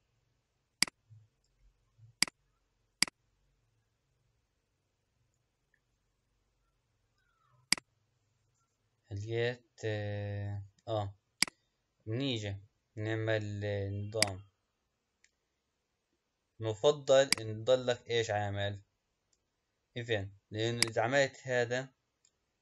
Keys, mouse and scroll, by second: 0.0-0.9 scroll down 1, 0.9 click, 2.3 click, 3.2 click, 7.8 click, 10.2 scroll down 3, 11.4 click, 12.9 scroll up 3, 14.2-20.4 drag.